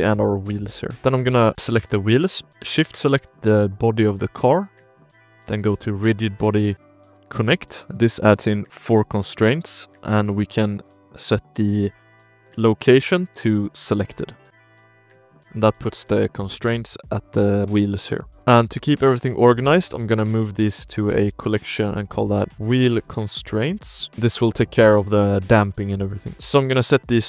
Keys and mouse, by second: 0.0 click, 0.6 ctrl+s, 0.9 ctrl+z, 1.1 drag, 1.4 g, 1.9 click, 2.5 shift+click, 3.1 click, 4.5-7.3 drag, 7.8 shift+drag, 8.2 drag, 9.9 click, 11.1-13.9 drag, 14.5 middle drag, 14.9 shift+middle drag, 15.1-15.5 middle drag, 15.8 middle drag, 17.4 middle click, 17.6 KP_1, 17.6 KP_3, 18.6 m, 22.5 l, 22.5 BackSpace, 24.2 click, 24.5 shift+drag, 25.6 shift+drag, 26.2 click.